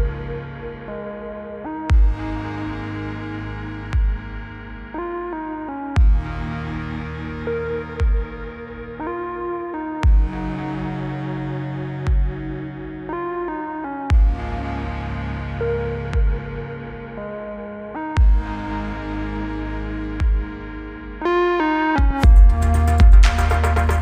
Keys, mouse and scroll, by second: 0.0-0.7 typing, 2.8 click, 6.1-8.3 typing, 11.6 click, 13.9 click, 16.5 Return, 18.7 click, 20.1-20.5 click, 23.3 click.